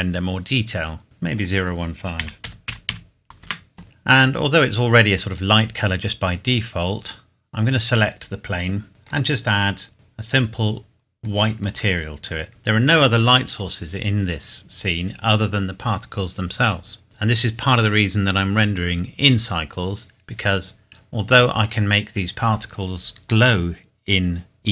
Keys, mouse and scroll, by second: 0.8-1.4 scroll up 1, 1.4 click, 2.2 KP_Decimal, 2.4 KP_0, 2.7 KP_1, 2.9 KP_5, 3.4 KP_Enter, 3.8 click, 4.5-5.3 scroll down 1, 5.3 click, 9.0 click.